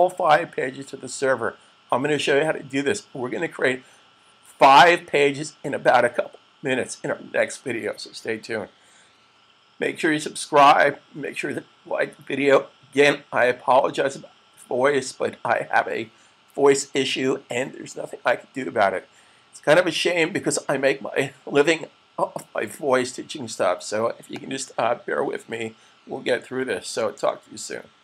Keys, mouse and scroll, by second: 24.1 click, 27.0 shift+super+click.